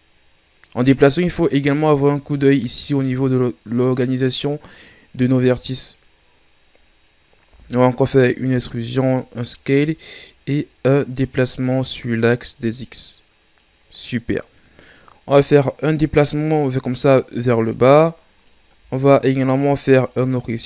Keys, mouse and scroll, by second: 1.6 middle click, 2.4 shift+scroll down 1, 2.7-7.5 middle drag, 7.5 e, 10.3-19.0 drag, 20.0-20.6 alt+right drag.